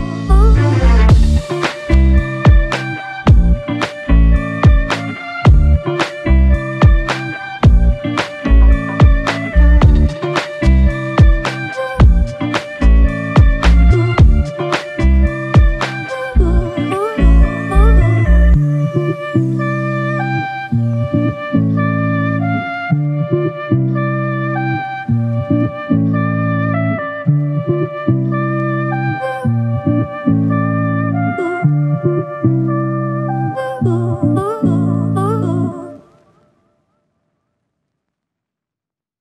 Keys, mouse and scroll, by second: 5.7 typing, 6.3 Return, 15.6 alt+click, 17.5 ctrl+alt+click, 21.3 ctrl+alt+click, 21.4 ctrl+alt+click, 24.5 double click.